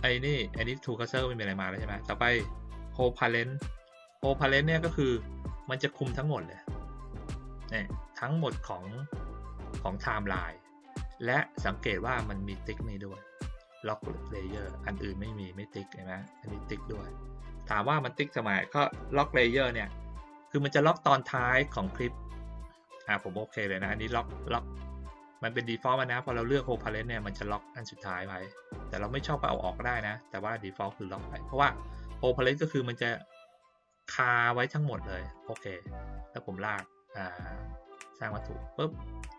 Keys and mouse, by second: 5.5 click, 14.5 click, 16.2 click, 26.2 click, 26.6 click, 29.4 click, 30.3 click, 35.3 click, 37.9 click.